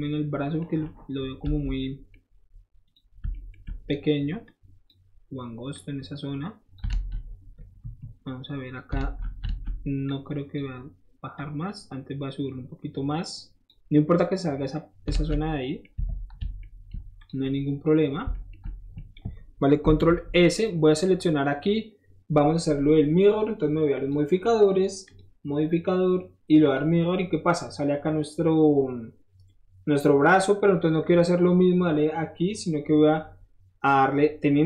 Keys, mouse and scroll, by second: 0.6 middle click, 0.8-1.4 scroll up 1, 1.4 Tab, 1.8 right click, 2.9 click, 3.3 shift+middle click, 4.4 shift+click, 5.7-6.7 shift+drag, 6.9 alt+z, 7.8 KP_1, 8.9 alt+z, 9.4 alt+z, 10.1 click, 11.3-13.7 drag, 13.7-15.2 middle drag, 15.2 alt+z, 15.3 middle click, 15.9 Tab, 16.1 middle drag, 16.2 middle drag, 16.6 middle drag, 17.2 click, 17.4-18.1 middle drag, 18.1 scroll down 1, 18.3 shift+middle drag, 18.6-18.9 shift+middle drag, 19.8 ctrl+shift+s, 20.5 click, 21.0-21.4 middle drag, 21.5 scroll down 1, 23.9 click, 25.0 click, 26.6 click, 27.4-31.4 middle drag.